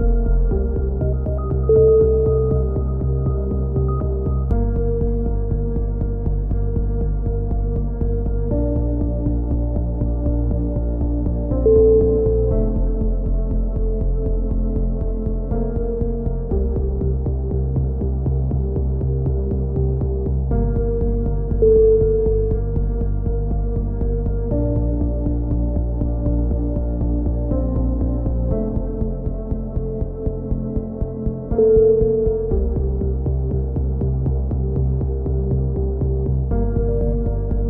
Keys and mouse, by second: 0.0-1.0 drag, 0.1 KP_7, 0.7 z, 1.3-2.3 right drag, 2.3 click, 3.2 a, 3.6 right click, 3.9-6.2 drag, 4.7 a, 5.4-6.7 right drag, 5.4 KP_3, 5.5 z, 6.6-7.9 drag, 8.1 right click, 8.4 click, 9.3-10.3 drag, 10.6 a, 10.8 right click, 11.0-12.6 drag, 13.5 right click, 13.5 a, 13.7 click, 14.0 ctrl+z, 14.6 click, 15.0 a, 15.2 right click, 15.7 e, 16.2 click, 19.0 click, 19.6 click, 20.3 right click, 20.7 click, 21.6 click, 21.8 a, 22.3 right click, 22.6 click, 23.7 a, 25.2 KP_1, 25.9 click, 27.5 KP_3, 31.1 right click, 31.7 right click, 32.0 KP_1, 35.8 right click, 36.0 z, 36.1 click, 36.5-37.6 right drag, 37.3 KP_7.